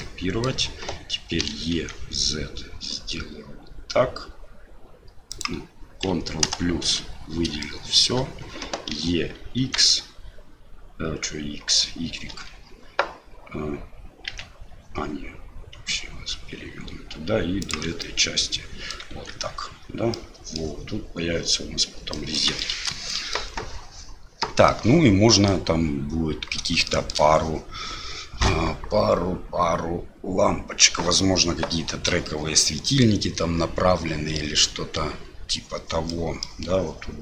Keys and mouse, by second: 0.1 click, 1.4 e, 6.4 ctrl+KP_Add, 7.6 shift+middle click, 8.9 e, 18.1 click, 19.1 Tab, 20.1-20.6 drag, 22.1 middle click, 22.6 shift+middle drag, 23.1 middle drag, 24.7-25.4 middle drag, 25.5-26.7 middle drag, 26.9 shift+middle drag, 32.1 drag, 32.3-33.0 middle drag, 36.1-36.4 middle drag.